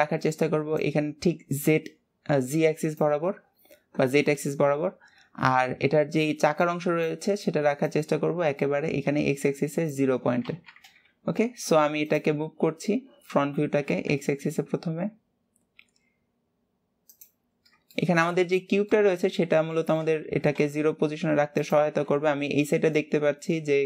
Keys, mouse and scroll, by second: 17.8 scroll up 2, 18.1 shift+middle click, 18.6 scroll up 1, 19.1 shift+middle click, 19.4 scroll, 19.8 shift+middle click, 20.0 middle click.